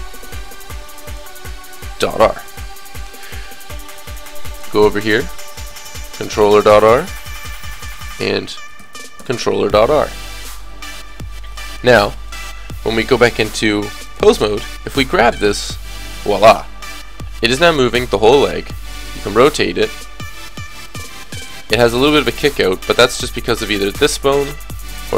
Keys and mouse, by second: 1.1 l, 3.9 click, 4.8 middle click, 5.6 click, 8.1 middle click, 9.1 click, 10.1 click, 11.0 KP_3, 13.5 click, 14.0-18.1 drag, 14.6 right click, 14.9 g, 18.5 r, 22.4-24.3 middle drag, 23.6-25.1 drag, 23.6 right click, 24.9 right click.